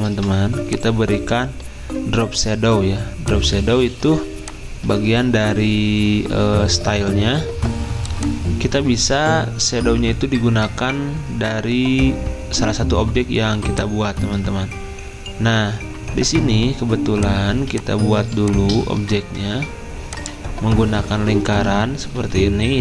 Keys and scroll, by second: 4.9 ctrl+z, 14.2 ctrl+z, 17.5 z, 20.4-21.1 typing, 22.2 d.